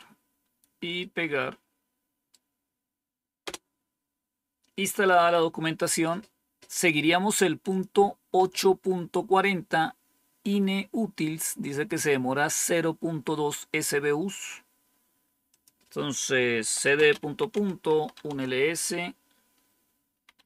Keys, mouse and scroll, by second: 0.9-2.2 right drag, 3.3 Return, 7.6 click, 8.1 click, 13.9-14.7 scroll up 1, 15.4 click, 16.3-18.5 typing, 16.9 scroll up 1, 19.9-20.4 typing.